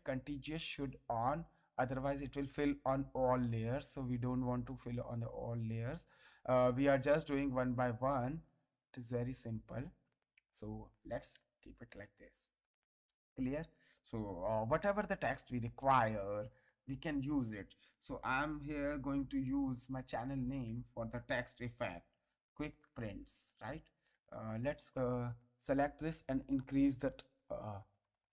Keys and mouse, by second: 2.2 click, 3.8 ctrl+Tab, 5.2 alt+click, 6.2 ctrl+Tab, 7.1 click, 7.8 ctrl+Tab, 8.8 alt+click, 9.7 ctrl+Tab, 10.5 click, 11.3 space, 11.7 ctrl+click, 14.7 t, 15.8 click, 18.5 shift+q, 20.2 space, 21.2 shift+p, 22.8 t, 23.5 s, 24.5 ctrl+^, 27.1 click.